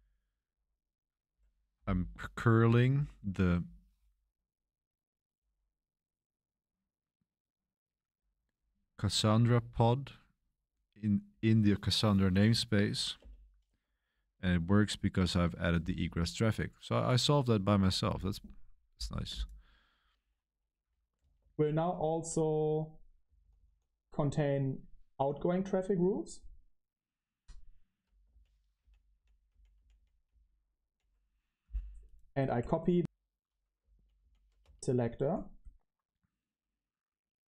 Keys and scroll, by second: 13.1 Return, 21.0-23.8 typing, 28.2 Right, 28.7-30.8 typing, 32.9 typing, 33.9 Tab, 34.1 Tab, 34.5 space.